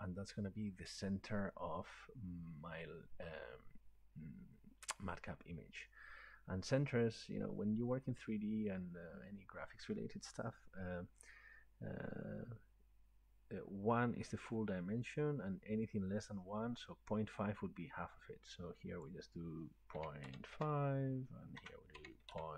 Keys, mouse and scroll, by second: 19.1 click, 20.0-22.5 typing, 21.6 Tab.